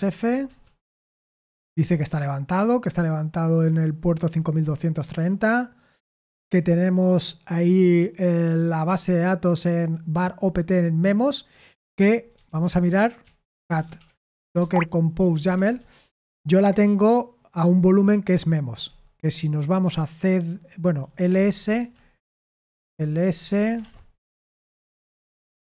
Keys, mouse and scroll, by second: 0.0-0.4 typing, 14.5 typing.